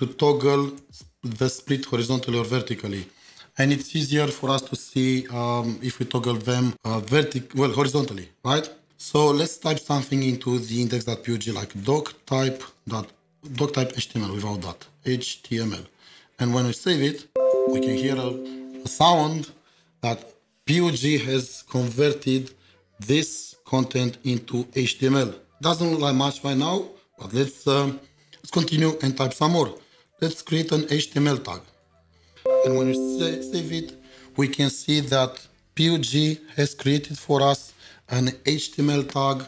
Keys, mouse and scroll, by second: 0.1 alt+shift+0, 0.8 alt+shift+0, 1.6 alt+shift+0, 2.1 alt+shift+0, 11.4-16.2 typing, 28.6 typing, 29.8-30.8 typing, 31.2 Escape, 31.8 ctrl+s, 35.8 ctrl+s, 36.2 ctrl+shift+4, 37.1 double click.